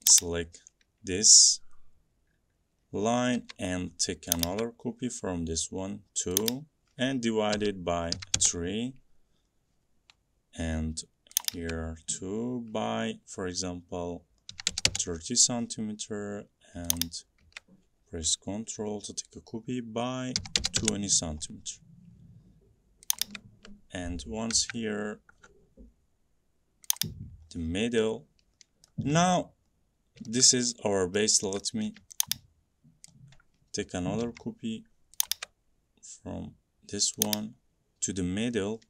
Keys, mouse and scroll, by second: 2.0 click, 3.5 m, 4.5 click, 6.5 click, 7.6-8.4 typing, 11.9-16.7 drag, 14.4-15.2 typing, 20.2-21.1 typing, 23.3-25.5 drag, 25.5 typing, 27.1 Up, 27.1 click, 27.6 middle click, 29.0 middle click, 29.2 middle click, 29.3 middle click, 31.1 scroll, 31.7 scroll, 33.2 click, 34.3 m, 35.4 click, 37.4 click.